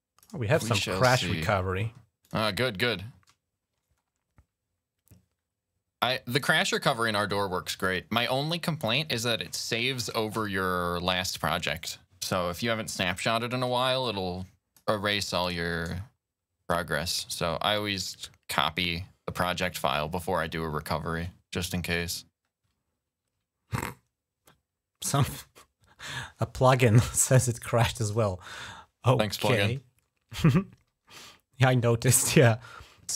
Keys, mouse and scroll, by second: 2.0 click, 6.2 click, 13.8 click, 19.2 click, 27.8 click, 30.3-30.8 scroll down 3.